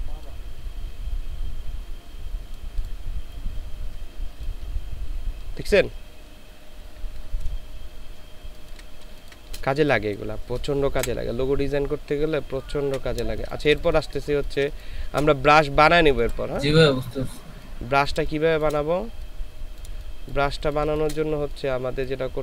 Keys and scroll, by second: 4.3 ctrl+space, 8.5 ctrl+space, 9.0 ctrl+space, 11.0 Delete, 12.9 ctrl+z, 13.2 ctrl+space, 14.1 ctrl+space, 18.2 space, 20.6 ctrl+space.